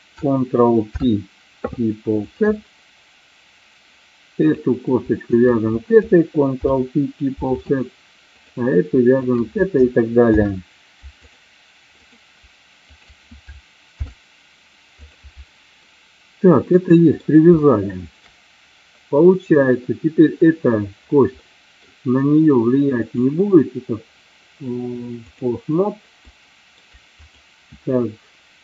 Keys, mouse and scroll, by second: 1.0 ctrl+p, 5.3 shift+click, 6.6 ctrl+p, 8.3 click, 9.3 shift+click, 10.3 ctrl+p, 12.1 click, 13.0 shift+click, 14.1 ctrl+p, 15.9-17.3 middle drag, 17.7 shift+middle click, 21.5 middle click, 23.2-25.6 drag, 26.4 shift+middle click, 27.2 click.